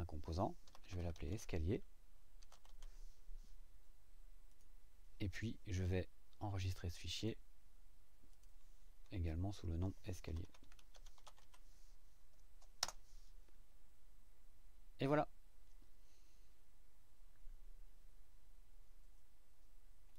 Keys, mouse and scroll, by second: 0.4-3.2 typing, 4.5 click, 7.1 click, 8.3 click, 10.0-11.9 typing, 12.8 Return, 20.1 click.